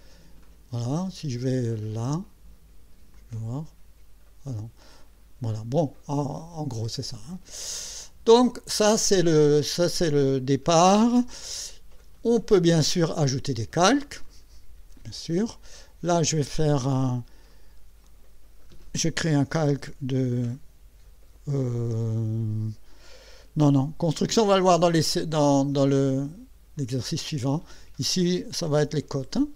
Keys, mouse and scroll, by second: 0.4 click, 3.1-5.5 drag, 8.4 click, 14.3 click, 17.5 click, 18.0 click, 19.7 c, 21.0 o, 26.8 click, 27.5 click, 28.4-29.5 typing.